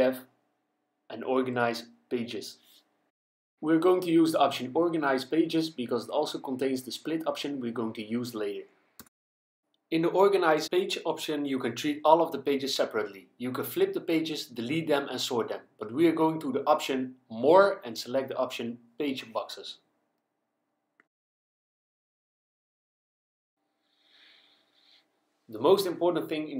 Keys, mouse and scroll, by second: 5.2 click, 11.1 click, 15.3 click, 19.0 click, 22.1 click, 25.4 click.